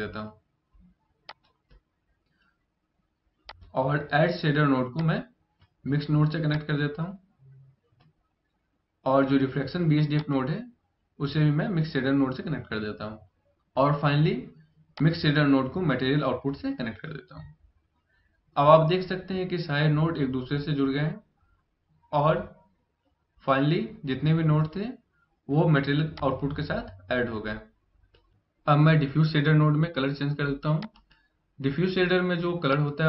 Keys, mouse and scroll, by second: 1.0 click, 3.2 click, 4.7 click, 14.7 click, 25.8 click.